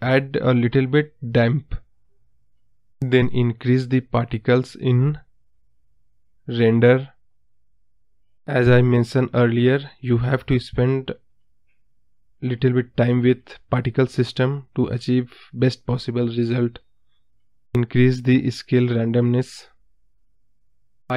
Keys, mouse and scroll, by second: 3.4-4.6 scroll up 1, 4.6-6.2 drag, 6.2-7.4 scroll down 1, 7.4 scroll down 1, 9.2 space, 9.7-11.4 scroll up 1, 11.4-13.3 drag, 15.5-17.0 scroll down 2, 17.0-18.3 drag, 20.6-21.1 drag.